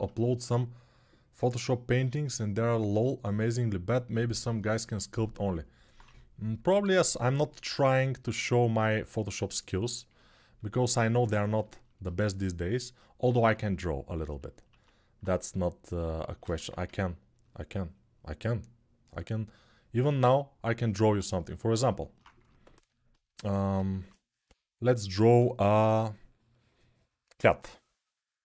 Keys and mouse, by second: 5.4 alt+click, 5.7-10.9 alt+drag, 5.8 2, 11.5 alt+shift+click, 11.9 alt+shift+click, 12.6 alt+right click, 13.3-28.4 ctrl+alt+drag, 14.4 alt+1, 16.3 1, 23.5 ctrl+shift+7.